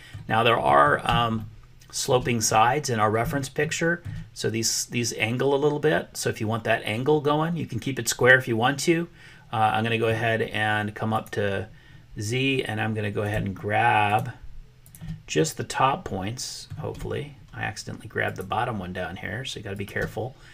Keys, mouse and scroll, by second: 0.6 middle click, 0.8 click, 1.3 shift+click, 1.6 shift+middle click, 2.5-4.1 middle drag, 8.3-10.1 middle drag, 13.1 click, 14.8 shift+click, 15.3-16.7 middle drag, 18.2 shift+click.